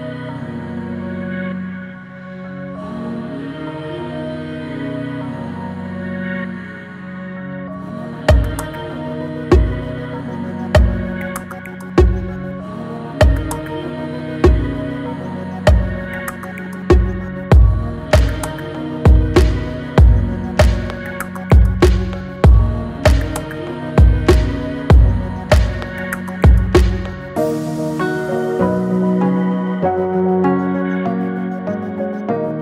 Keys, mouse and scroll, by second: 1.0-3.6 middle drag, 3.6 click, 5.4 alt+click, 6.4 alt+click, 7.2-7.7 scroll up 1, 7.7 shift+middle click, 8.4-8.7 scroll up 1, 10.0 alt+click, 11.9 click, 12.8 alt+click, 14.1 e, 27.2 scroll down 1, 28.1-29.9 middle drag, 29.9 e.